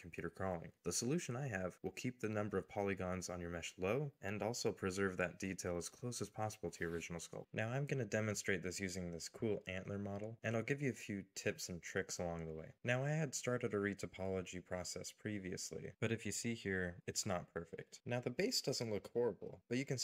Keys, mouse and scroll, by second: 14.5-15.1 scroll up 1, 15.3 middle click, 16.0-17.7 scroll up 1, 18.5 middle click.